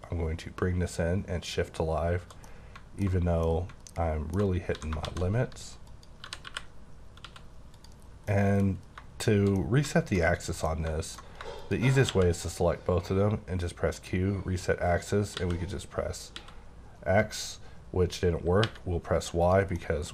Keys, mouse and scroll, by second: 2.5 middle click, 3.2 scroll up 1, 3.4 middle click, 4.7 s, 5.0 shift+z, 5.8 click, 6.2-7.3 typing, 7.8 click, 8.3 middle click, 8.7 scroll down 2, 9.6 middle click, 10.3 scroll up 2, 10.6 middle click, 11.6 shift+click, 11.9 click, 12.1 q, 13.9 click, 15.4 x, 16.4 x, 18.7 y, 19.4 click, 19.8 middle click.